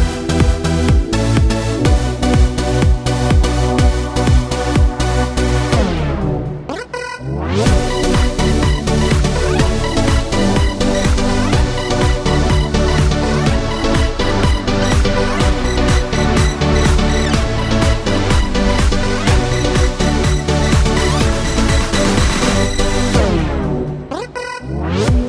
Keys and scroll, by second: 9.6 Delete, 20.6 ctrl+c, 21.2 ctrl+v.